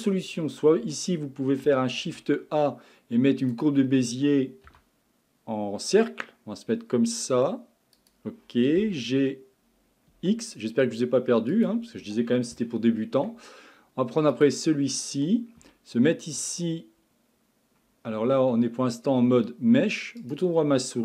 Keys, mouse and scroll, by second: 0.8 Tab, 2.0 shift+a, 4.7 s, 8.8 g, 12.6-14.3 shift+middle drag, 14.3 click, 15.6 Tab, 16.4 Tab, 18.3 Tab, 19.3 Tab, 20.2-21.0 right drag.